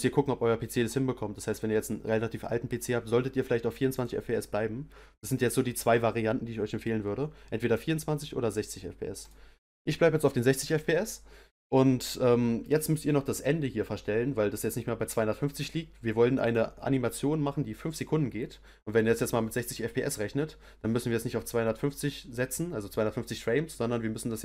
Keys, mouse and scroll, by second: 3.9-6.9 drag, 16.4-19.4 drag.